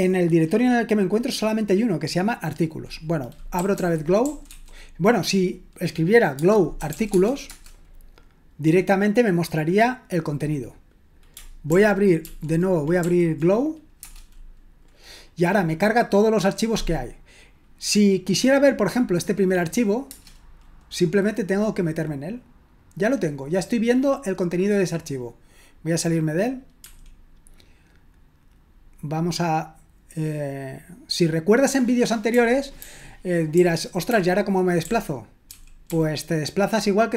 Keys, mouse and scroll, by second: 3.3-5.0 typing, 6.6-7.4 typing, 7.5 Return, 11.7 ctrl+p, 12.2 ctrl+p, 13.0 ctrl+p, 14.0 Return, 20.0 Return, 26.8 Escape, 32.3-35.9 typing.